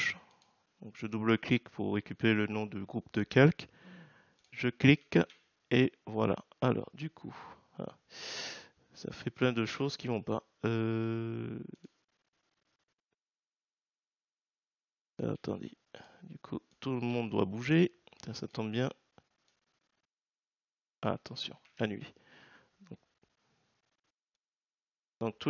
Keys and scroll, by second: 5.2 ctrl+v, 21.6 ctrl+z.